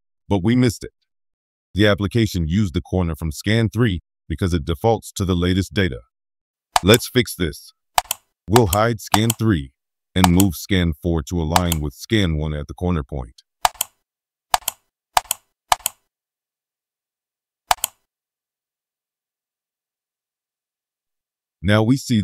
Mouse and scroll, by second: 6.7 click, 7.9 click, 8.5 click, 9.1 click, 10.2 click, 11.5 click, 12.5 middle click, 12.5-12.8 scroll up 1, 13.0 middle click, 13.6 right click, 14.5 click, 15.1 click, 15.7 click, 17.6 right click, 18.5-20.3 scroll up 5, 20.5 middle click, 20.8-21.5 scroll up 4, 22.1-22.2 scroll down 2.